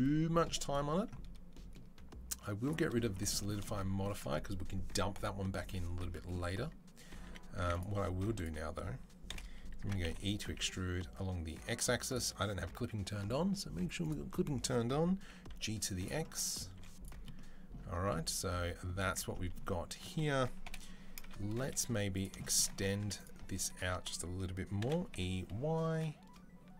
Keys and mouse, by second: 6.4 Tab, 7.1 2, 7.5 x, 8.3-13.8 alt+middle drag, 9.1 KP_7, 9.6 e, 13.8 click, 13.9-23.0 middle drag, 15.1 g, 16.6 z, 17.7 Tab, 18.8 Tab, 20.5 KP_7, 21.7 z, 22.8 2, 23.0 click, 23.1 alt+middle click, 23.4 alt+click, 24.0-26.7 middle drag, 24.6 e.